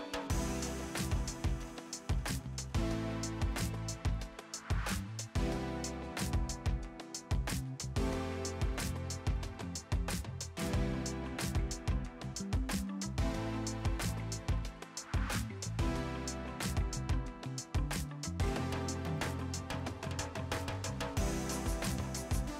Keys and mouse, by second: 0.0 click, 0.2 Delete, 0.3 click, 0.4 Delete, 0.5 z, 0.7 Delete, 0.8 click, 1.2 Delete, 1.4 click, 1.6 Delete, 1.6 click, 2.0 Delete, 2.0 click, 2.8 click, 2.9 Delete, 3.0 click, 3.3 click, 3.4 Delete, 3.5 click, 3.9 click, 4.0 Delete, 4.9 click, 5.8 click, 8.1 click, 11.0 KP_8, 11.2 Return, 12.0 1, 13.0 click, 14.2 shift+click, 14.5 shift+click, 15.7 click, 18.4 click, 20.1 Pause, 20.5 x, 21.2 ctrl+x, 21.4 click.